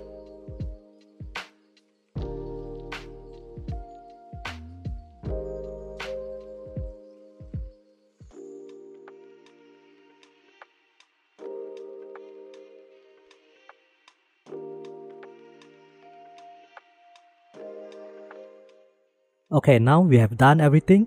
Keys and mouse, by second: 0.3 click, 1.8 typing, 3.2 typing, 6.0 shift+click, 6.3 typing, 7.1 shift+click, 8.2 f, 10.3 f, 10.5 3, 10.9 shift+click, 11.3 shift+click, 11.6 click, 12.0 middle click, 12.1 Tab, 12.6 middle click, 12.8 middle click, 13.0 middle click, 13.2 ctrl+s, 14.1 click, 14.6-15.1 drag, 16.6-17.5 drag, 17.6-17.9 shift+middle drag, 17.6 shift+KP_1, 18.2-19.4 shift+middle drag.